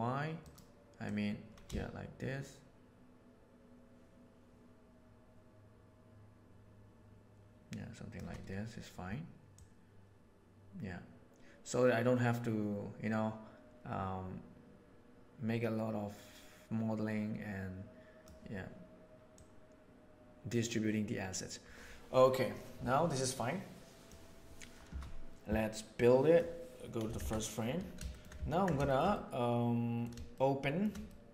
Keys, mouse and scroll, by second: 1.1 click, 1.6-6.5 shift+middle drag, 6.5-8.2 shift+drag, 9.5-14.5 drag, 17.2-18.2 right drag, 19.3-21.1 right drag, 21.1-24.0 drag, 25.8-26.3 drag, 27.1 shift+Left, 28.4-29.9 shift+middle drag, 30.3-30.7 shift+middle drag, 31.0-31.3 middle drag.